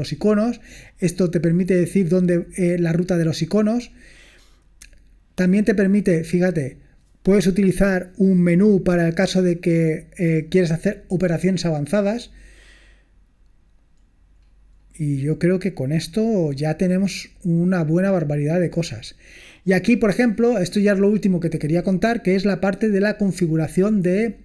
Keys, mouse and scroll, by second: 12.7-16.1 scroll down 1, 16.1-16.6 scroll down 1, 18.7-20.5 scroll down 3, 20.5 scroll down 1, 21.9-22.8 scroll down 2, 22.8-24.1 scroll down 1, 24.1 scroll down 1.